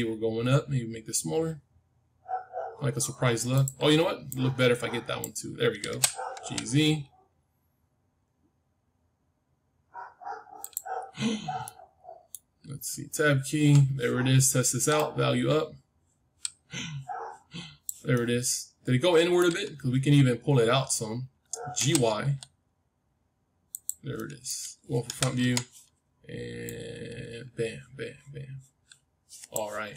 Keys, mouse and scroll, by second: 4.2-6.3 drag, 5.8 g, 10.8-11.5 scroll down 1, 11.5-13.6 middle drag, 13.3 Tab, 14.9-16.9 drag, 18.1-20.0 middle drag, 19.7 Tab, 21.7 g, 24.1-26.3 middle drag, 25.0 KP_1, 25.3 Tab, 26.6-28.6 drag.